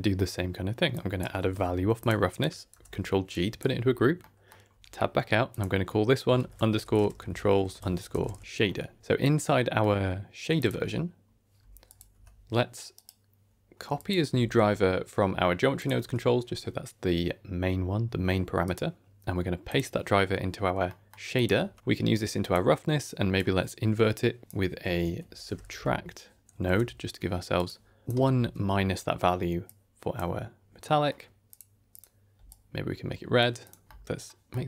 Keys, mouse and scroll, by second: 0.8-2.0 drag, 2.2 click, 2.6 ctrl+g, 3.2 click, 3.7 x, 4.1 middle click, 4.6 Tab, 5.0-5.4 scroll up 2, 5.4-8.4 drag, 9.0 click, 9.4 middle click, 10.5 click, 11.8 click, 12.0 Tab, 12.8-14.0 right drag, 15.7 click, 15.9 Tab, 18.5-19.7 drag, 18.5 right click, 20.8 middle click, 21.2 click, 21.5 Tab, 21.8 middle click, 21.8-22.1 scroll down 3, 22.1 click, 22.9-27.6 drag, 28.0 alt+s, 28.0 click, 29.5 click, 30.8 middle click, 31.4 click, 31.8 click, 33.5 click, 33.8 middle click, 34.0 Tab, 34.2 middle click, 34.4-34.6 scroll down 3.